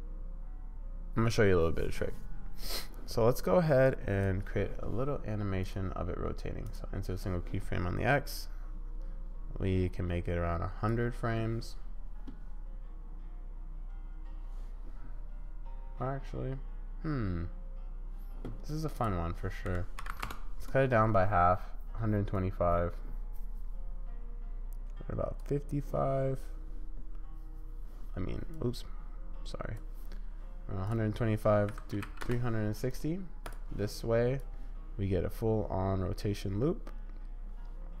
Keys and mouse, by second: 3.9 click, 5.7-6.7 drag, 8.4-10.9 drag, 19.1-20.3 drag, 20.7-22.5 middle drag, 24.9 click, 28.5-29.8 drag, 30.9-33.5 drag, 34.4-36.4 drag, 36.4-36.9 drag, 37.4-38.0 drag.